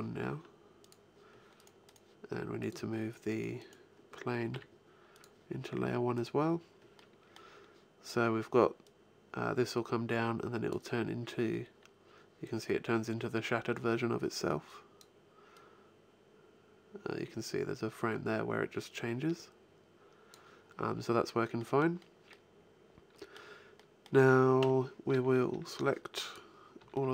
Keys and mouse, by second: 0.7 click, 4.3 m, 5.0 right click, 6.0 click, 6.5 middle click, 6.7 click, 7.0 middle click, 7.1 click, 8.6-10.6 middle drag, 10.8 middle click, 11.2 middle click, 11.6 middle click, 14.3-17.3 drag, 20.5 middle click, 21.4-24.4 middle drag, 24.4 KP_1, 24.9 a, 25.3 b, 26.6 b.